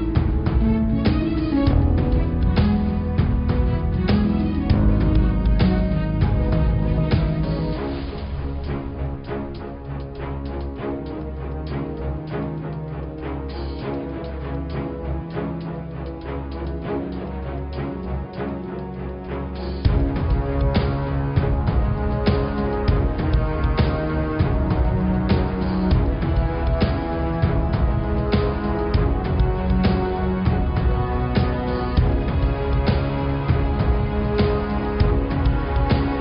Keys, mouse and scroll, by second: 0.3 Tab, 0.7 middle click, 1.1-2.5 scroll down 4, 2.5 click, 2.9-4.9 middle drag, 4.9 e, 10.7 g, 24.2 click, 26.2 click, 26.7 click, 27.7 click, 27.8-28.1 scroll up 4, 28.3 click, 29.2 g, 29.9 middle click, 30.6 click, 30.8-31.1 scroll down 1, 31.1 middle click, 32.1 click, 32.7-33.6 scroll up 3, 33.6 g.